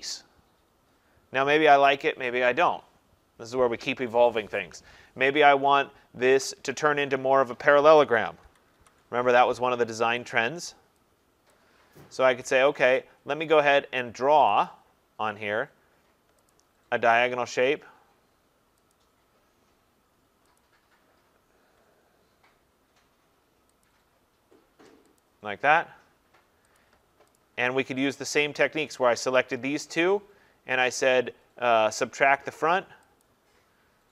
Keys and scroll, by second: 8.4 ctrl+-.